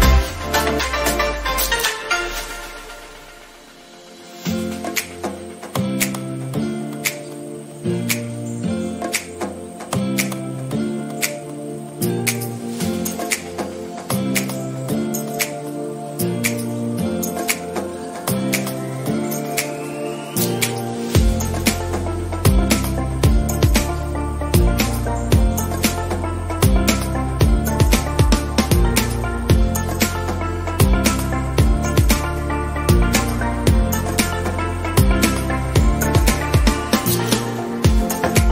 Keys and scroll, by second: 35.1 ctrl+d.